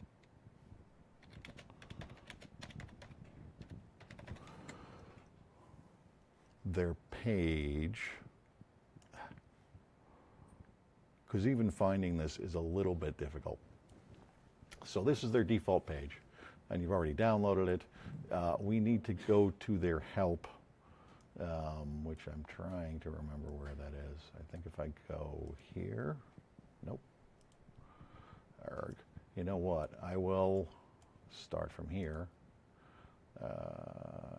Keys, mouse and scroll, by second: 1.3-4.8 typing, 7.4 click, 8.9 click, 18.8 scroll up 2, 19.2-19.8 scroll down 4, 20.0 middle click, 27.3 click, 28.8 click, 31.9 click.